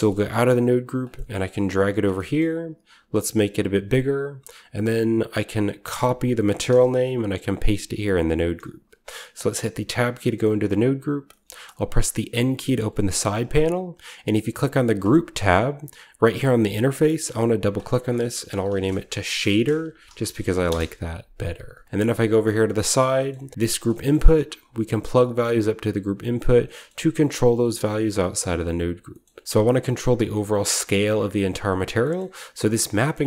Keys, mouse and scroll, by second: 0.4 g, 0.8-1.9 drag, 1.6 g, 1.9-3.8 middle drag, 2.0-3.5 scroll down 1, 3.5-3.8 scroll down 1, 6.4 ctrl+click, 6.7 ctrl+c, 7.3 click, 7.5 ctrl+click, 7.6 ctrl+v, 7.9 ctrl+click, 8.4-9.7 ctrl+drag, 9.7 Tab, 10.0-12.2 scroll down 1, 10.1-13.5 middle drag, 12.2-13.5 scroll down 1, 12.2 n, 14.9-15.9 drag, 17.4 click, 17.5 click, 18.5-20.4 typing, 20.6 Return, 21.5-22.5 scroll down 1, 21.7-23.1 middle drag, 22.5-23.8 scroll up 1, 23.6-26.1 drag, 23.8-26.1 scroll down 1, 24.1 g, 26.1 typing, 26.7-28.1 scroll up 1, 26.8-28.1 middle drag, 26.9 Tab, 28.1-28.5 scroll up 1, 28.3-29.0 middle drag, 28.5 Tab, 29.1 middle drag, 29.4-30.6 drag, 29.4 g, 29.5 middle click, 30.8-32.8 scroll up 1, 31.3-33.2 drag, 32.8-33.2 scroll down 1.